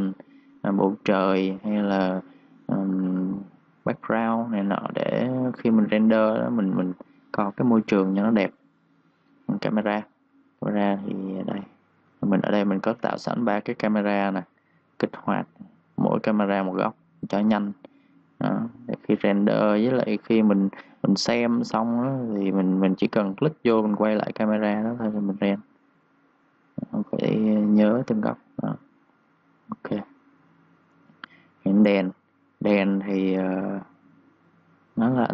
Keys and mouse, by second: 3.4-6.6 typing, 3.7 click, 5.3 click, 5.7 click, 6.3 click, 6.8 click, 10.9 click, 12.1 ctrl+z, 12.7 click, 21.4 2, 21.5 click, 21.9 2, 22.2 click, 22.7 2, 22.8 click, 29.1 click.